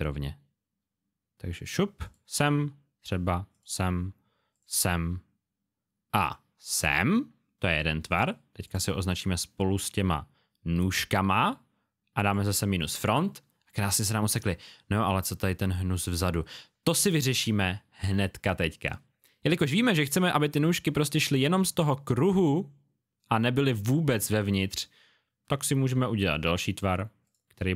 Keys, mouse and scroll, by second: 2.0 shift+click, 3.5 click, 6.6 click, 12.5 click, 13.6 space, 13.7 click, 27.2 click.